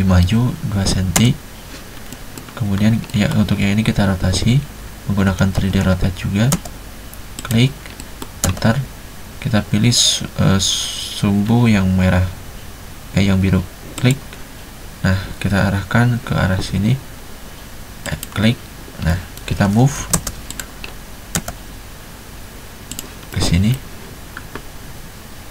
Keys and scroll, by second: 0.8-1.3 typing, 5.1-6.7 typing, 8.6 space, 20.1 m, 20.2 space, 21.5 space.